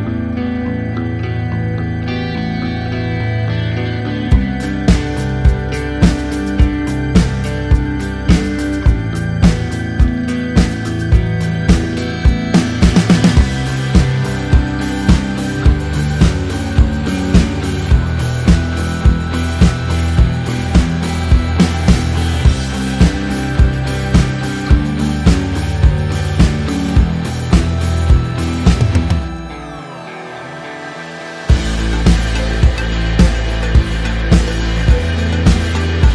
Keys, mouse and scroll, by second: 3.8 KP_Enter, 5.2 click, 7.4 Return, 8.2 t, 9.2 alt+click, 10.8 click, 11.3 Return, 11.8 click, 14.0 t, 14.7 click, 15.5 Return, 17.9 click, 18.4 click, 20.2 click, 20.6 click, 23.3 click, 24.1 click, 26.0 click, 27.4 click, 29.4 KP_Enter, 34.4 click, 34.9 click.